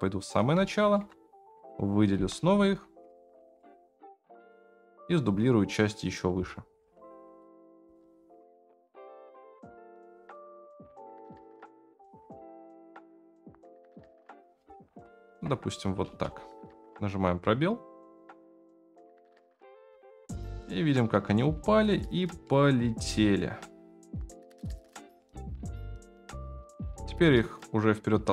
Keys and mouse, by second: 0.6 shift+middle drag, 1.6 click, 2.1 KP_Decimal, 3.5-5.1 middle drag, 5.7-6.1 drag, 6.4 shift+middle drag, 6.9 shift+d, 7.7 r, 9.9 g, 11.1 click, 11.7 r, 14.3 click, 15.3 KP_0, 16.1 space, 20.8 shift+middle click, 22.6-23.6 shift+middle drag, 25.3-26.1 shift+middle drag.